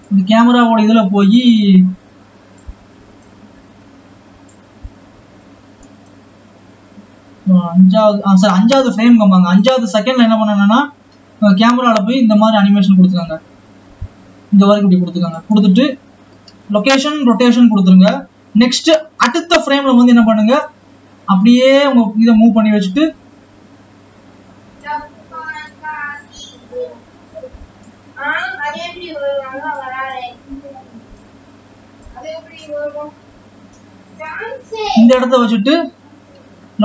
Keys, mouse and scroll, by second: 0.0 click, 1.4-9.2 drag, 9.7-12.7 drag, 19.5 click, 21.4 click, 23.5-23.9 scroll down 2, 24.9-30.4 drag, 32.0-35.1 drag.